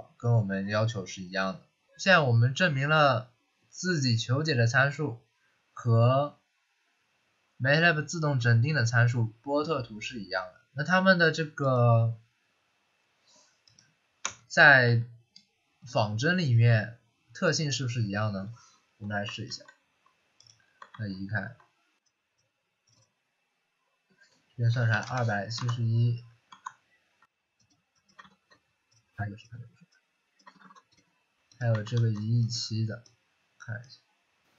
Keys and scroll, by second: 14.8 Delete, 19.4 ctrl+x, 20.8 ctrl+v, 24.4-25.5 typing, 26.4 alt+Tab, 28.2 ctrl+v, 30.5 ctrl+c, 30.6 ctrl+c, 31.7 ctrl+v.